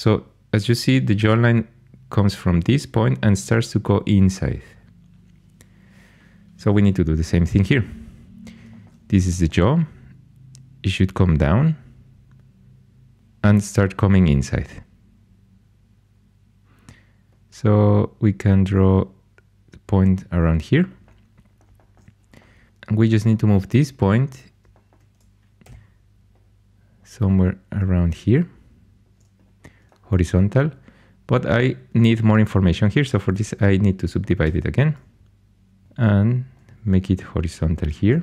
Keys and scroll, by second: 22.7 1, 25.6 g, 34.4 shift+s, 35.8 g, 37.7-38.2 typing.